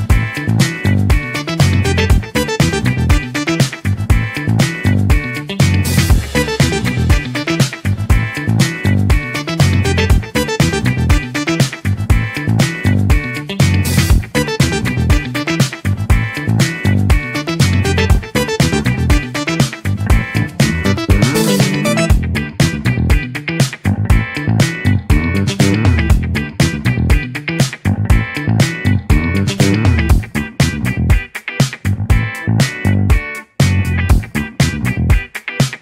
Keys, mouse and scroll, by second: 3.7-10.0 middle drag, 10.0-11.6 drag, 11.6 shift+a, 15.8-17.2 drag, 19.8 ctrl+t, 19.8 click, 23.6 scroll down 4, 23.7-35.6 drag.